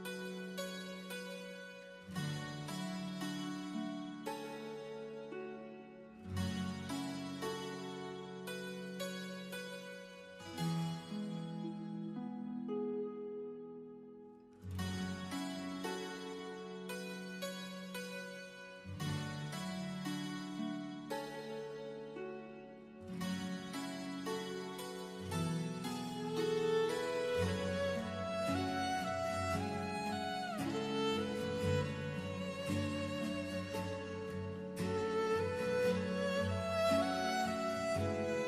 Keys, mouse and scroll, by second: 3.1 click, 4.0 KP_2, 4.5 KP_Enter, 5.3 click, 7.1 Delete, 8.5 click, 10.0 right click, 10.8 click, 12.0 Escape, 12.7 click, 14.0 right click, 17.5 click, 18.9-19.3 scroll down 1, 19.4 middle click, 23.0 click, 26.8 right click, 28.7 click, 29.5-32.0 scroll up 1, 32.2 click, 33.6 KP_1, 34.2 KP_Enter, 35.6 click, 36.2 scroll down 1, 36.8 middle click.